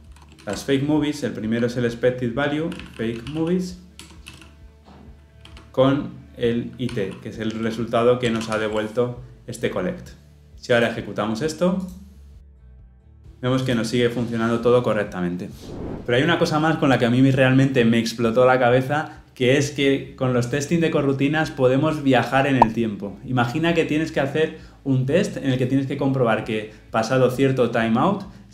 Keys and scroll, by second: 0.4 ctrl+p, 4.1 Return, 5.4 Escape, 8.3 Escape, 8.5 ctrl+alt+o.